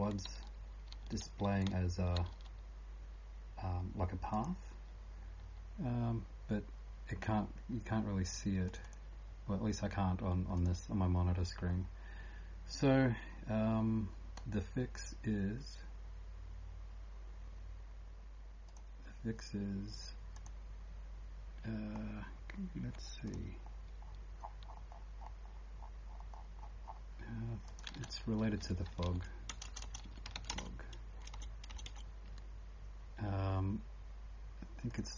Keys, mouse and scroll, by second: 0.0-35.1 typing, 4.3 click, 8.7 click, 8.8 click, 10.6 click, 10.9-11.4 scroll down 2, 11.4 click, 12.2 scroll down 1, 23.3 click, 23.7 scroll down 3, 24.3-25.2 scroll down 4, 25.2 click, 25.2 scroll down 1, 27.7 click, 27.7 scroll down 33, 27.9 ctrl+f, 32.3 Escape, 33.0 scroll down 1, 34.9 click.